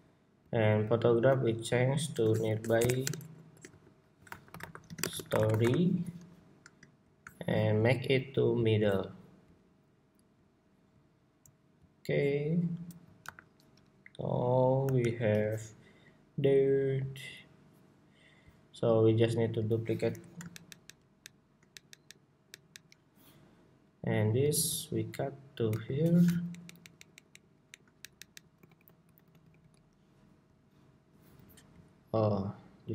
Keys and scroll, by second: 5.9 Escape, 13.8 super+-, 14.6 super+-, 15.6 super+=, 19.7 super+d, 20.6 super+d, 24.3 super+x, 25.1 super+x, 25.4 super+v.